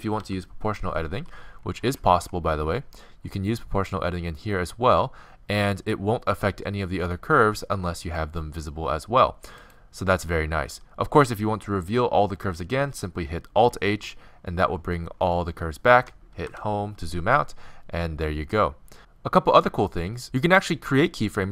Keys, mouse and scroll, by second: 0.2 o, 1.2 g, 1.7-2.2 middle drag, 13.9 alt+h, 16.5 Home.